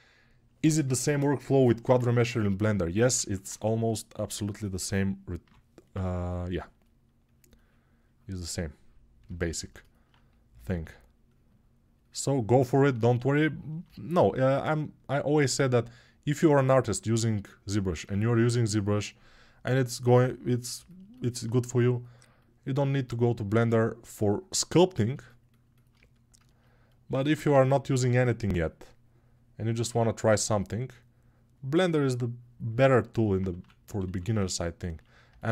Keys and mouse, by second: 2.4-24.9 alt+drag, 5.2 [, 24.9-31.5 shift+right drag, 31.5-35.5 shift+drag.